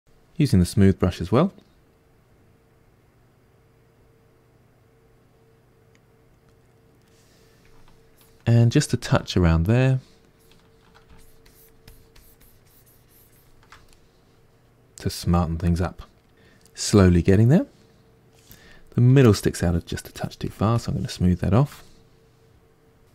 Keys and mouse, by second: 8.1-13.9 ctrl+drag, 13.9-19.6 middle drag, 19.6-22.2 shift+drag, 22.2-23.1 middle drag.